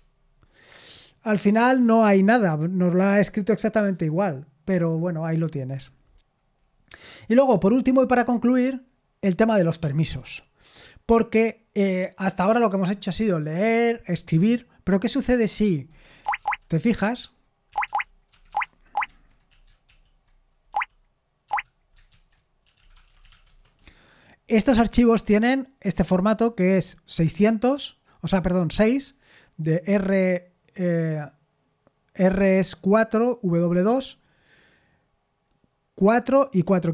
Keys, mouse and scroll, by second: 9.8 Escape, 9.8 click, 15.9-18.3 typing, 18.5 Escape, 19.0 super+h, 19.5 typing, 20.7-23.8 typing, 22.1 ctrl+c.